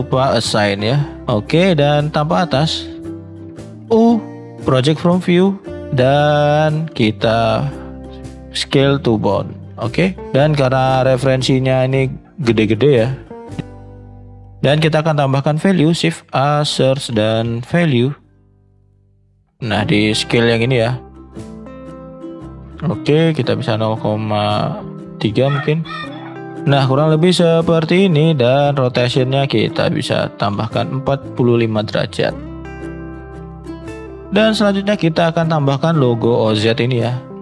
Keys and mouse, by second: 1.3 shift+middle click, 15.7 shift+a, 20.3-20.9 drag, 23.4-27.4 drag, 34.0 shift+middle click.